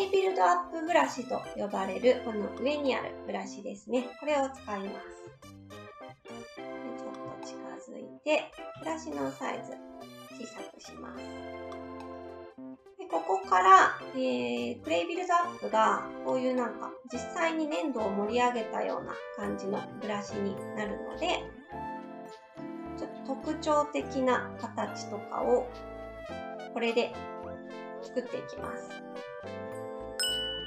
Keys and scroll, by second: 8.7 s, 19.6 ctrl+z, 19.9 ctrl+z.